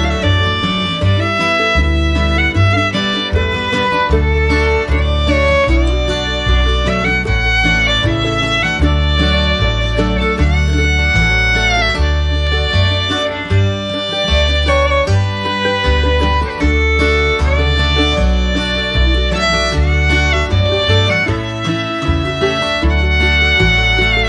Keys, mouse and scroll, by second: 8.6 right click, 11.0 shift+space.